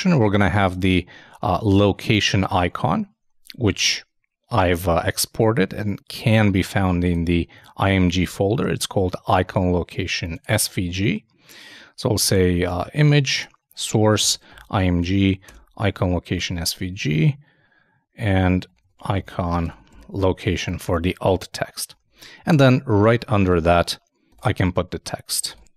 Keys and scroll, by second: 0.7 super+Tab, 2.6 super+Tab, 16.9 shift+Tab, 17.1 shift+i, 22.0 super+Right, 22.5 super+Return, 23.3 shift+Return, 24.7-25.7 typing.